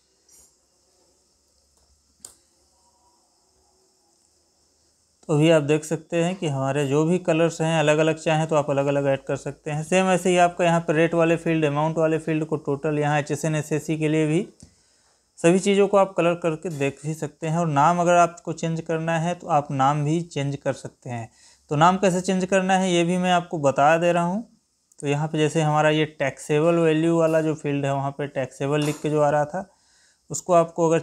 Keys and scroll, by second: 1.7 alt+p.